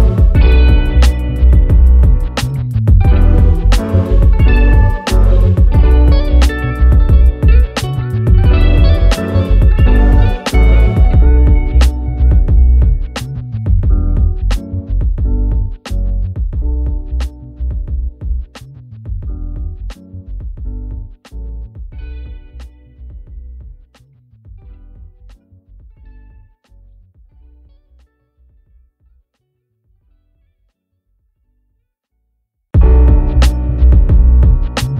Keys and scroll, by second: 11.4 ctrl+k, 23.5 ctrl+z.